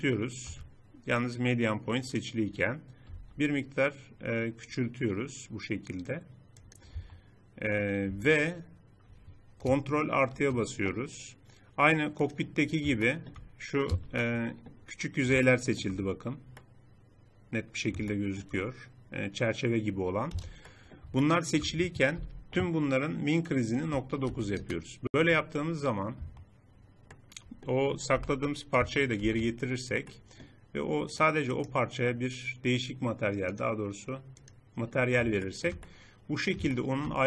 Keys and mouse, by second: 3.2 s, 7.0 Tab, 8.1 Tab, 10.2 ctrl+KP_Add, 13.9 z, 18.1 middle click, 20.1 middle click, 20.3 z, 22.2 n, 26.1 Tab, 28.1 n, 29.1 alt+h, 33.4-35.6 drag, 35.7 click.